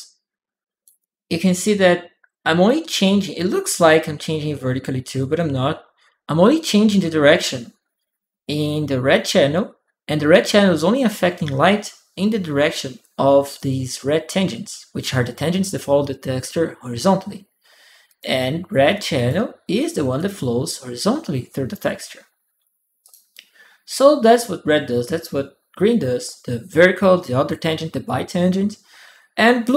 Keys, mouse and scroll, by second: 0.8-2.4 right drag, 1.4-2.6 drag, 17.8 click, 18.9 click, 19.6 click, 19.9 click, 22.8 click, 29.4 click.